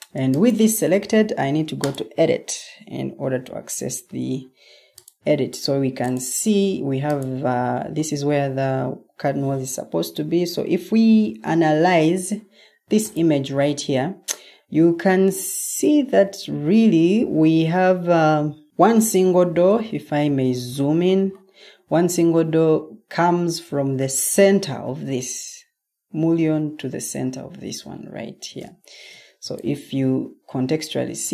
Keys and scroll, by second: 11.8 super+Tab, 13.7 super+Tab.